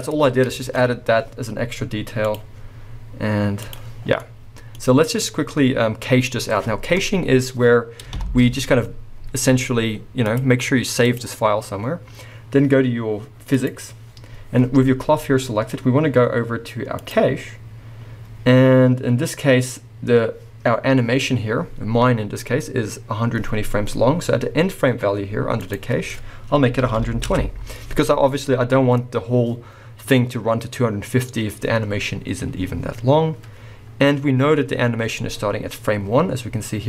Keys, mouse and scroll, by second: 0.0 Tab, 0.0-2.2 middle drag, 0.3 scroll down 2, 0.8-2.2 scroll up 2, 2.2 click, 3.7 drag, 4.0 scroll down 2, 4.1-10.3 middle drag, 8.3 shift+Left, 10.3-13.7 drag, 13.7-15.3 middle drag, 15.3-17.0 scroll down 1, 17.0-36.8 drag, 17.5 scroll down 1, 27.4 Return.